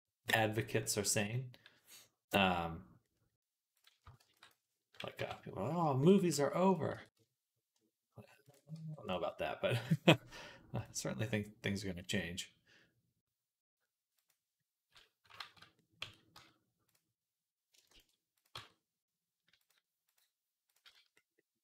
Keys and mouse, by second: 3.6 click, 4.0 shift+d, 4.4 middle click, 5.0 KP_3, 6.1 g, 6.7 r, 7.0-16.8 ctrl+drag, 8.6 g, 15.2 ctrl+z, 15.9 Tab, 16.2 z, 16.8-19.4 middle drag, 17.7 shift+s, 18.4 Tab, 19.4-21.6 drag, 20.7 z, 21.5 r.